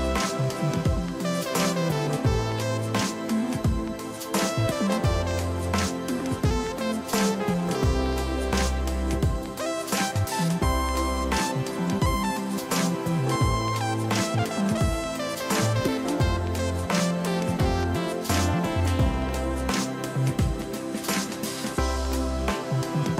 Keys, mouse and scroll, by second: 4.3 ctrl+t, 16.4 click.